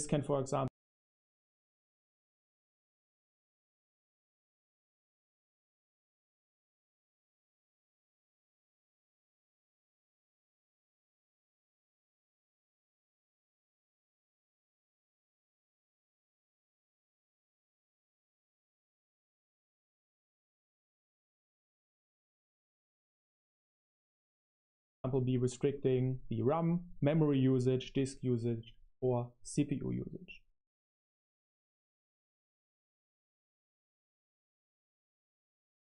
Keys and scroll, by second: 0.5 space, 1.3 super+3, 2.3 super+7, 3.4-8.1 typing, 9.4-16.3 typing, 16.0 super+1, 16.3 super+1, 18.1 super+3, 19.4 super+7, 19.9-25.2 typing, 30.4 space, 31.2 super+7, 32.1 i, 32.6 BackSpace, 33.8-35.9 typing.